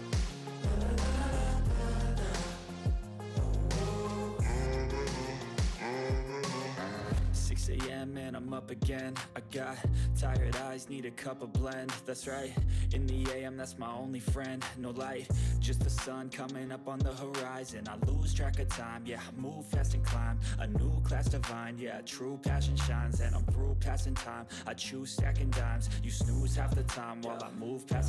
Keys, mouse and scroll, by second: 0.0-0.5 typing, 1.0 click, 2.3 click, 3.6 ctrl+a, 4.5 click, 5.3 right click, 6.1-9.8 drag, 10.1 ctrl+s, 12.5 click, 12.8-14.2 typing, 14.2 ctrl+s, 14.4 click, 15.6-16.9 typing, 16.9 ctrl+s, 17.3 click, 22.0-23.4 typing, 23.9-25.7 drag, 25.7 Return, 26.2 Return, 27.7-28.0 drag.